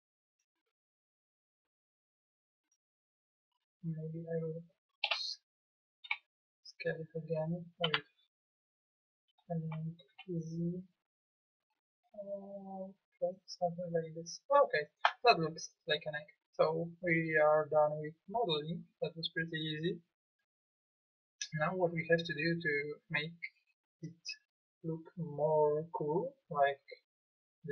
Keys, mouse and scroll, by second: 1.3-2.4 drag, 5.1 KP_4, 5.2 KP_1, 6.0 KP_1, 7.8 Tab, 9.6 s.